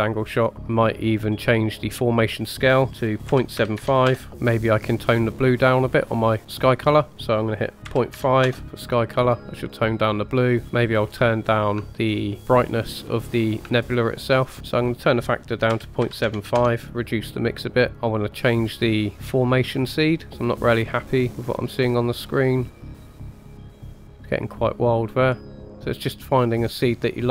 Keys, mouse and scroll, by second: 0.5 middle click, 1.2-1.5 scroll up 2, 2.1-4.3 drag, 4.3 middle click, 6.8 click, 11.8-12.5 shift+middle drag, 13.7-14.4 shift+middle drag, 14.7 click, 16.6-17.9 drag, 17.9 shift+middle click, 19.1-20.2 middle drag, 20.7 click, 22.6 click, 23.0 click, 23.5 click, 23.7 click, 24.2 click, 25.4 click.